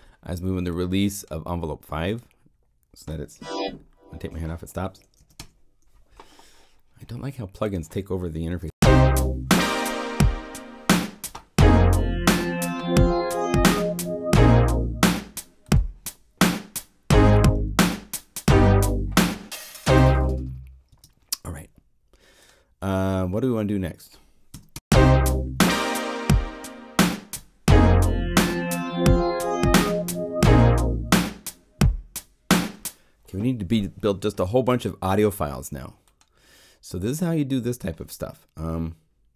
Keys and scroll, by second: 5.1 0, 5.3 Home, 8.4 0, 8.6 Return, 24.5 0, 24.7 Return, 32.5 0.